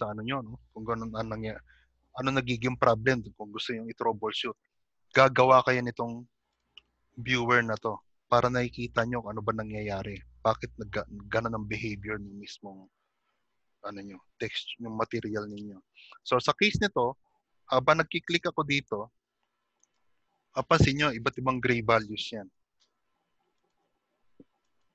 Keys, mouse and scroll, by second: 11.4 click, 11.4 g, 12.0 middle click, 23.1 ctrl+shift+click, 24.2 ctrl+shift+click.